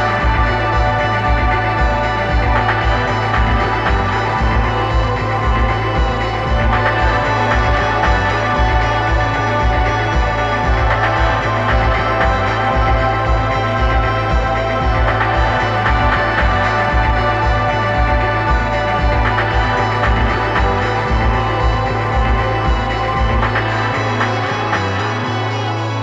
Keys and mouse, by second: 1.1 KP_1, 3.0 g, 8.9-10.7 middle drag, 12.5 click, 13.2 click, 16.3 click, 18.4 g, 19.3 click, 19.8 click, 21.1 g, 23.5-26.0 drag.